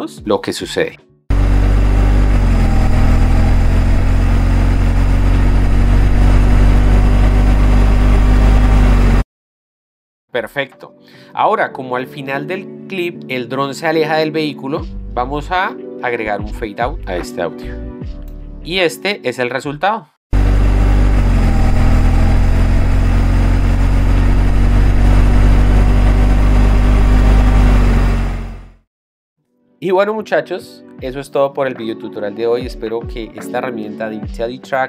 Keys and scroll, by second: 1.3 space, 9.4 space, 20.5 space, 29.1 space.